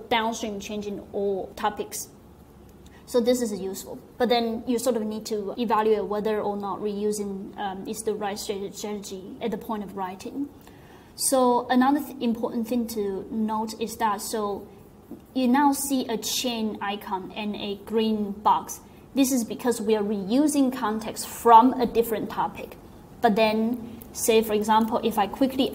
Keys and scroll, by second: 23.9 Down, 24.7 super+Return, 25.4-25.7 typing.